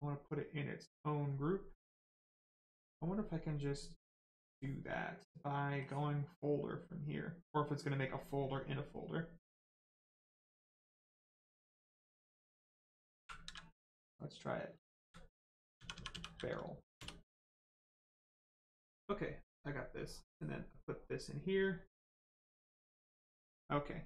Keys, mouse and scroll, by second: 3.4 click, 5.8 click, 11.6 click, 14.6 BackSpace, 15.0 a, 15.9 r, 16.1 e, 20.0 click, 22.3 right click.